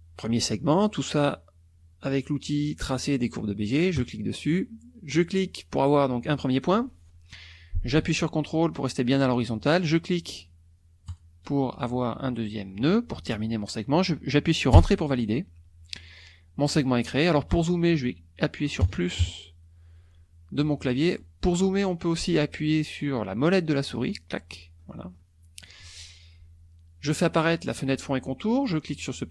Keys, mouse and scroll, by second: 3.9 click, 5.1 click, 11.0 ctrl+click, 14.7 Return, 18.8 KP_Add, 20.5 click, 24.0 click, 24.8 click, 25.2-29.3 drag.